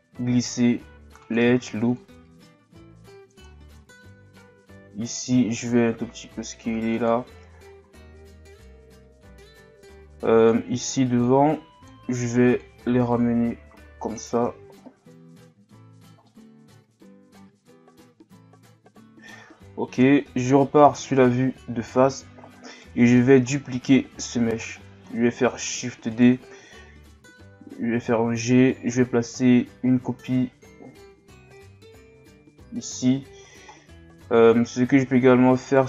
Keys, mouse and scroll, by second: 3.6-4.2 scroll up 1, 4.7-5.0 scroll up 1, 5.0 alt+right click, 7.6-8.6 scroll up 1, 8.7 z, 10.4 right click, 12.6-14.3 drag, 14.3 z, 15.0-15.3 scroll down 1, 15.3 Tab, 15.9-16.2 scroll down 2, 16.2-19.2 middle drag, 21.0-21.9 scroll down 2, 21.9-22.2 scroll down 3, 22.2-22.7 scroll up 1, 22.7 right click, 23.1 Tab, 23.5 scroll down 1, 23.7 a, 24.6-25.6 scroll down 2, 25.6 shift+d, 32.5-33.1 scroll up 1, 33.7-34.1 scroll down 1, 34.3-35.2 scroll up 2, 35.6 alt+right click.